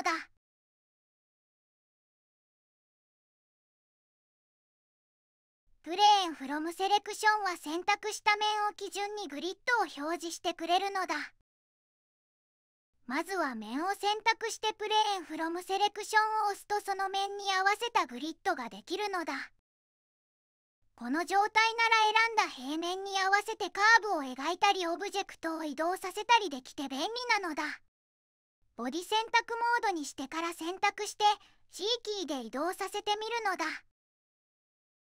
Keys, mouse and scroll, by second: 30.0 g.